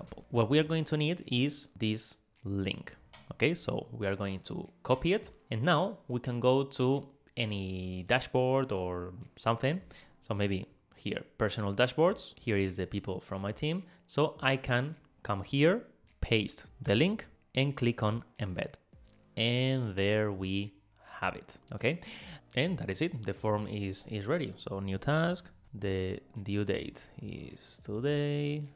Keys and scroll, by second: 16.9 super+v, 26.0 Tab.